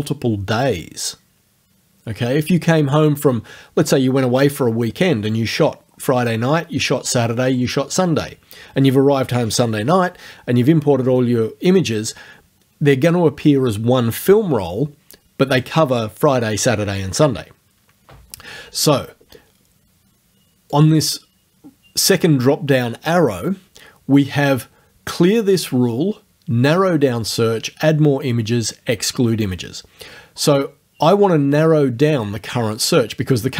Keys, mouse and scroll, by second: 20.7 click.